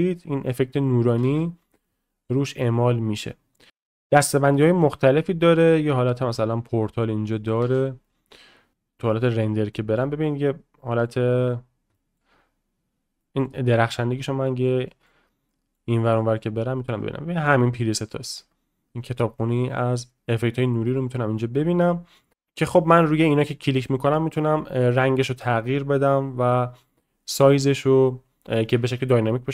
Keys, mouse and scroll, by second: 0.0 click, 1.2 space, 2.5 click, 2.5 space, 3.7-5.5 drag, 7.3 middle drag, 7.6 space, 8.0-8.7 middle drag, 8.7 space, 9.1-9.4 middle drag, 9.7 middle click, 10.8 middle drag, 11.9 shift+middle drag, 13.2 middle click, 13.6 middle drag, 13.9-14.3 middle drag, 14.4 middle drag, 14.9 middle drag, 15.5 middle drag, 15.9 middle click, 16.2 middle click, 17.0-18.2 drag, 20.8-21.2 middle drag.